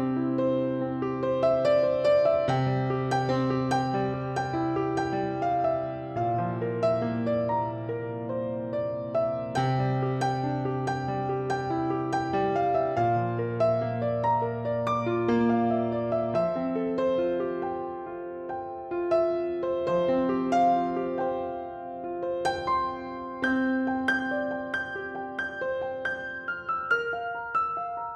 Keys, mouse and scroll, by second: 0.1 3, 1.6-2.1 scroll down 1, 2.1-3.4 shift+middle drag, 2.6-3.4 scroll up 1, 3.4 click, 4.3 click, 5.2 click, 5.9 click, 7.0-10.7 drag, 10.8 click, 13.6 click, 14.3-19.3 middle drag, 18.3-18.7 scroll up 1, 19.1 scroll up 1, 19.3 drag, 19.7 shift+click, 20.1 shift+drag, 20.3 shift+click, 20.7-21.2 middle drag, 21.2 shift+click, 21.6 shift+click, 22.9-24.3 drag, 24.3-24.9 middle drag, 24.9 click, 25.1 scroll down 1, 25.3-28.1 middle drag, 26.1 scroll down 1, 26.5-26.9 scroll up 1, 27.5-28.1 scroll down 1.